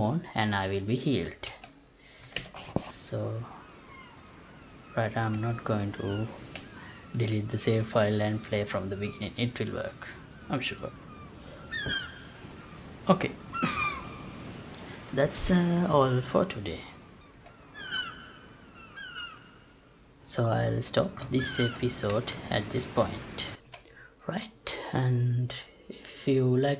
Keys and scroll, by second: 1.5 F11, 2.4 alt+p, 17.3 F9, 23.7 F9.